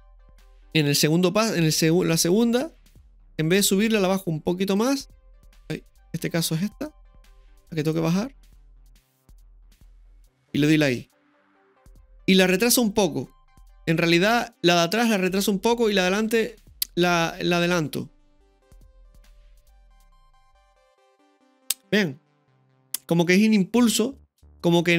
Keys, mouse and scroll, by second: 1.6-3.5 drag, 4.8-5.7 drag, 6.1 ctrl+z, 6.9-7.9 right drag, 7.9-9.8 drag, 10.1 i, 19.1 click, 19.3 space.